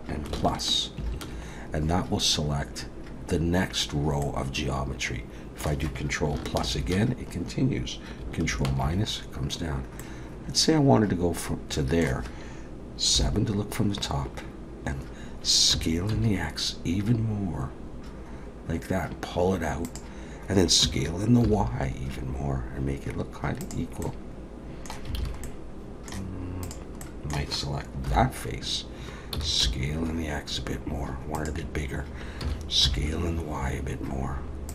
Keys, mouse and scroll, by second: 1.0 ctrl+KP_Add, 4.2 middle click, 6.6 ctrl+KP_Add, 8.5 ctrl+KP_Subtract, 10.0 middle click, 13.1 KP_7, 15.7 s, 20.8 s, 24.0 middle click, 25.2 alt+a, 25.4 middle click, 26.6 click, 27.0 middle click, 28.1 KP_7, 29.3 s.